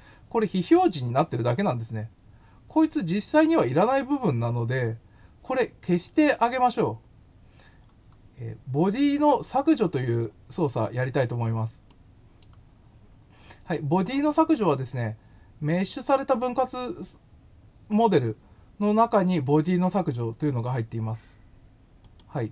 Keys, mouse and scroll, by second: 1.1 scroll down 2, 5.6 scroll up 1, 7.8 scroll down 2, 9.1 click, 11.3 scroll up 2, 11.8 middle click, 15.7 click, 22.0 click.